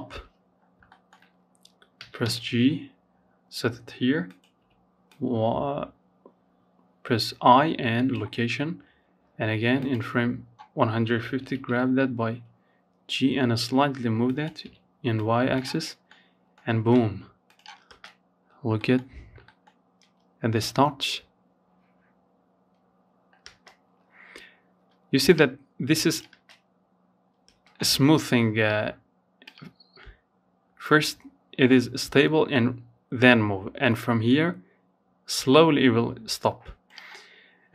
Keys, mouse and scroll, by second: 0.1 g, 8.0-9.6 drag, 9.6 g, 14.1 scroll down 1, 14.3 middle click, 14.7-15.6 scroll up 1, 15.6 click, 16.0 space, 16.6-16.9 scroll up 1, 16.9 shift+middle click, 17.2-17.5 shift+scroll up 2, 17.6-21.6 shift+middle drag, 21.6 space, 23.5-24.5 drag, 24.5 space, 25.6 space, 27.6-36.1 drag.